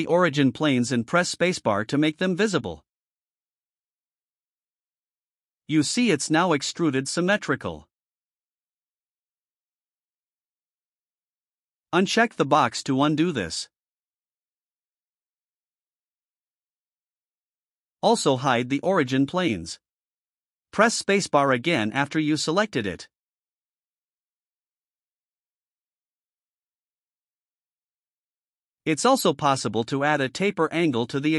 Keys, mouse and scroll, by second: 0.3 click, 2.3 space, 4.5 click, 5.6-8.9 drag, 14.1 click, 19.9 click, 21.5 space, 23.7-25.8 drag, 26.2-27.4 drag.